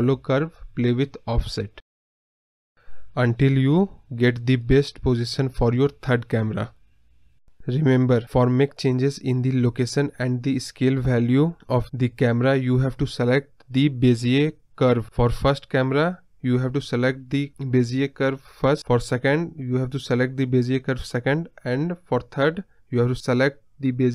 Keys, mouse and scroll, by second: 17.8 ctrl+z, 18.5 click, 19.4-24.1 drag.